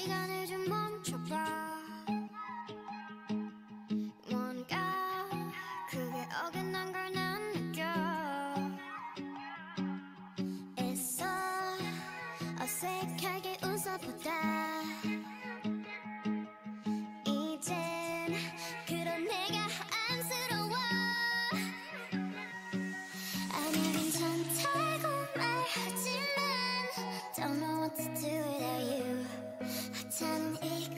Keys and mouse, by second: 1.1 g, 4.4-6.1 drag, 4.6 g, 5.6 g, 7.2 Tab, 13.8 Tab, 15.3-23.7 drag, 23.2 right click, 23.7-25.0 middle drag, 25.0 KP_1, 27.4 click, 29.7 ctrl+e, 30.4 a.